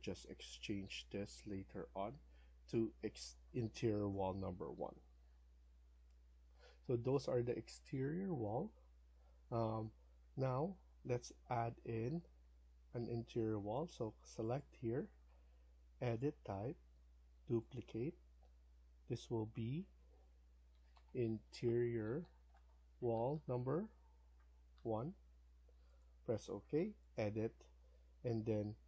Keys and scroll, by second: 20.4-23.8 typing.